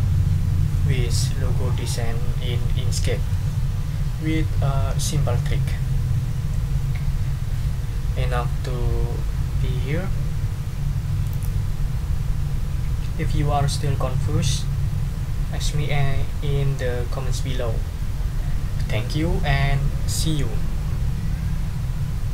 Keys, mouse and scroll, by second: 11.3 click.